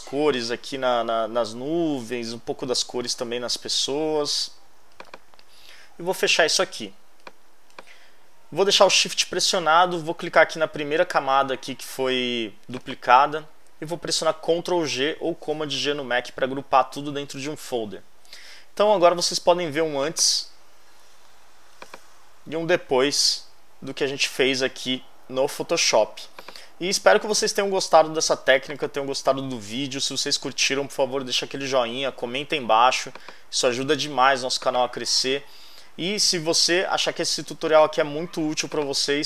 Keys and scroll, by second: 14.7 super+g.